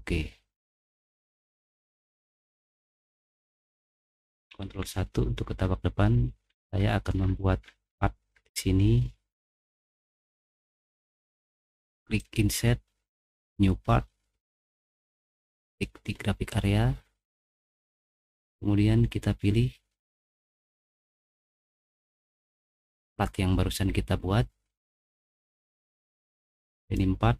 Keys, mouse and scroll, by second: 1.5 click, 1.9 middle click, 2.3 middle click, 2.7 middle click, 4.7 ctrl+1, 6.5 middle click, 6.5-7.7 scroll up 3, 7.1 middle click, 7.6 middle click, 8.3 middle click, 9.5 middle click, 9.5 scroll up 1, 12.2 click, 13.3 click, 15.7 click, 16.5 click, 16.7 middle click, 17.6 click, 20.0 middle click, 20.1-20.7 scroll up 2, 22.3 click, 26.9 click.